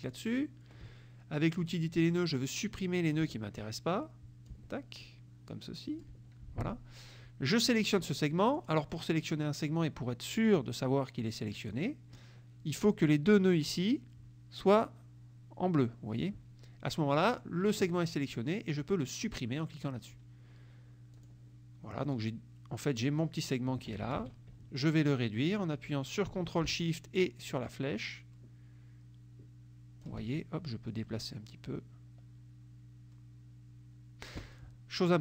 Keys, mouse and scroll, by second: 0.1 click, 1.6 click, 2.1 click, 3.3 Delete, 3.7 click, 4.6 Delete, 5.1 click, 6.2 Delete, 7.9 click, 8.6 click, 11.7 click, 19.3 click, 21.2 click, 22.2-24.1 drag, 24.2 ctrl+z, 27.6-30.3 ctrl+shift+drag, 31.0 click.